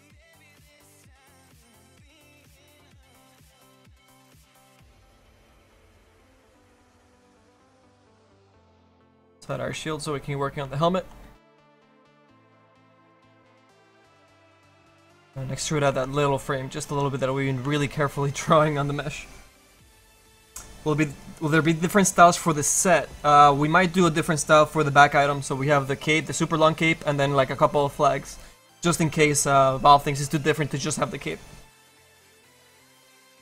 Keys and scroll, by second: 8.5 q.